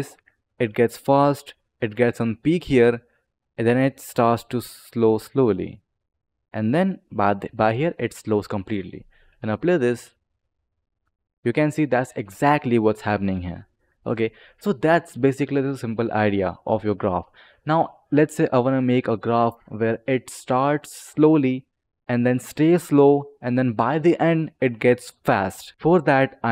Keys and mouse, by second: 9.3-10.2 drag, 9.8 space, 11.4 click, 13.7 click, 14.3 click.